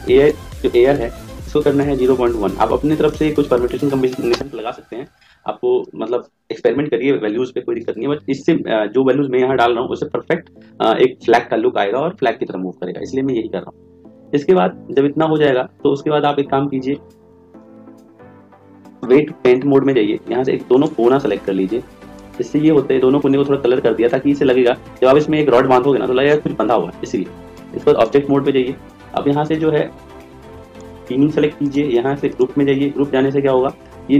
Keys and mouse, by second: 0.2 click, 17.5 click, 20.8-23.3 drag, 28.0 click, 30.7 click.